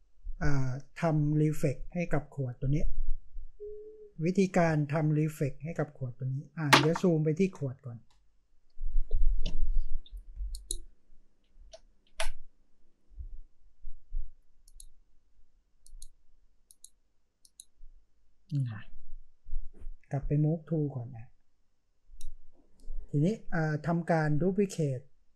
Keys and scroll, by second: 4.5 space.